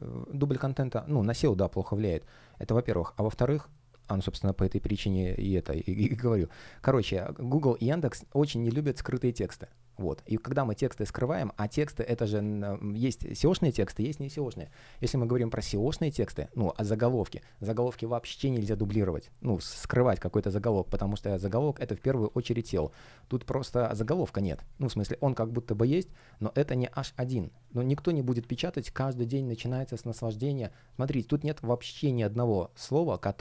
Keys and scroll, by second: 11.7 super+я, 12.3 super+r, 22.1 super+r, 24.4 space, 26.5 space, 27.8 space.